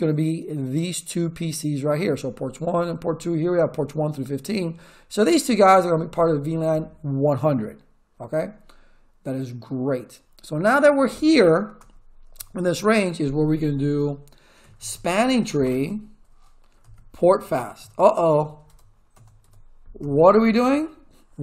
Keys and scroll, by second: 11.8 Return, 14.4-19.1 typing, 18.7 Tab, 19.4 Tab, 20.0 Return.